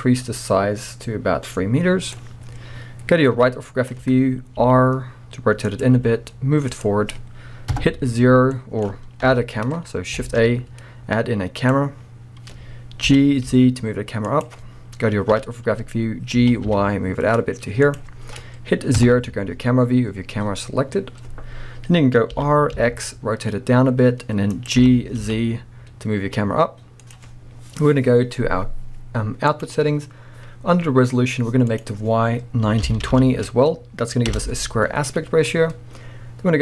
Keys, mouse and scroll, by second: 3.4 KP_3, 4.6 r, 5.9 g, 6.9 click, 7.7 KP_0, 8.4 scroll down 1, 8.5-14.4 middle drag, 9.2 KP_1, 9.8 scroll up 2, 10.2 shift+a, 12.0-12.6 scroll down 2, 12.6-13.1 scroll up 2, 13.1 g, 14.4 click, 15.3 KP_3, 16.4 g, 18.0 click, 18.1-18.9 scroll down 1, 18.9 KP_0, 22.3 r, 24.7 click, 24.8 g, 27.1 click, 29.5 click, 31.7-36.6 drag, 34.3 Return, 35.4-36.6 scroll down 2.